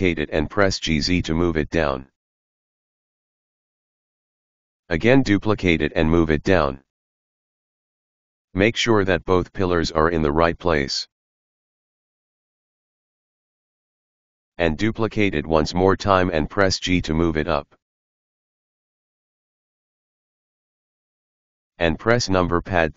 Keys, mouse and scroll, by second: 4.8 shift+d, 9.2 right click, 9.5 g, 11.1 g, 14.7 shift+d, 22.8 KP_3.